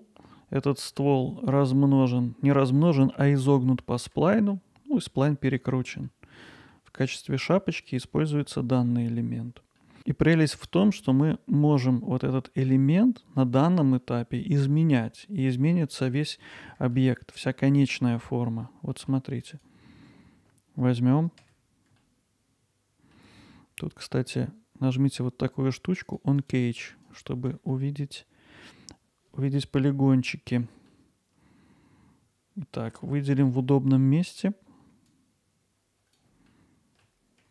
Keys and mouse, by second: 0.4-0.8 alt+middle drag, 1.0 middle drag, 4.3 alt+middle click, 6.1-6.7 middle drag, 7.2 click, 7.7 click, 9.8 middle drag, 10.6 click, 14.1-15.0 middle drag, 16.3 middle drag, 16.9-17.4 alt+middle drag, 17.7 middle drag, 18.9 middle drag, 19.5 click, 21.4 Tab, 22.0-23.1 alt+middle drag, 26.1 click, 26.4 click, 27.0 click, 27.7-30.6 alt+middle drag, 30.9-32.8 alt+middle drag, 33.0 ctrl+alt+middle click, 33.6 middle click, 34.2 middle click, 35.1-36.2 drag, 36.5-37.0 alt+middle drag.